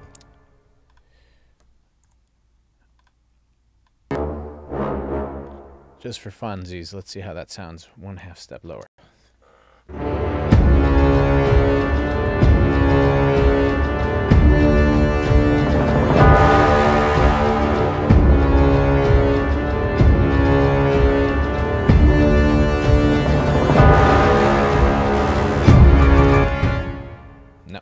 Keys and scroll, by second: 8.8 space, 26.3 space.